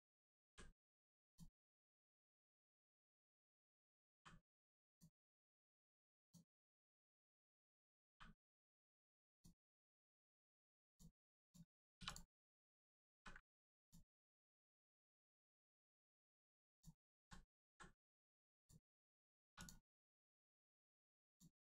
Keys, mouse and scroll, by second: 0.8 scroll down 1, 1.2 click, 3.0 l, 4.9 click, 5.4 right click, 6.2 click, 6.7 shift+middle click, 7.1 scroll up 1, 8.7 right click, 8.9 click, 9.9 middle click, 10.4 shift+middle click, 10.9 click, 11.4 click, 13.1 ctrl+e, 13.8 click, 15.3 right click, 16.7 click, 17.1 ctrl+z, 17.9 right click, 18.0 right click, 18.6 click, 19.5 2, 19.6 click, 20.0 right click, 21.3 click.